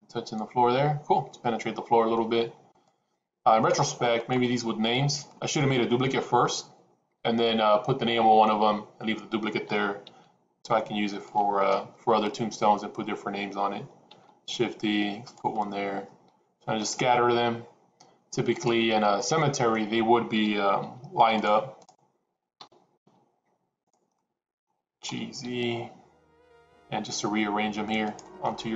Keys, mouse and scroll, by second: 1.5-2.2 middle drag, 2.7 click, 4.1 click, 5.3 middle click, 9.8 g, 11.8 KP_7, 14.2 shift+d, 15.5-16.9 middle drag, 18.5 click, 19.2-19.8 middle drag, 20.4 g, 21.8 click, 22.6 g, 24.1 middle click, 25.1 g.